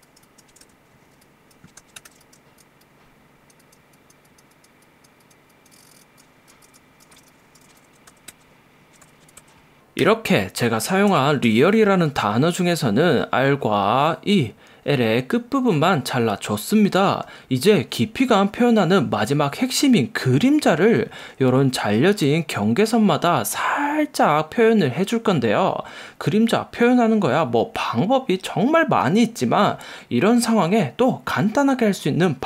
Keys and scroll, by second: 0.6 super+=, 1.2 x, 1.8 p, 2.0 super+=, 2.2 space, 6.9-7.8 typing, 7.9 alt+super+-, 8.1 alt+super+0, 8.3 super+=, 9.1 alt+super+0, 10.1 v, 11.2 super+=.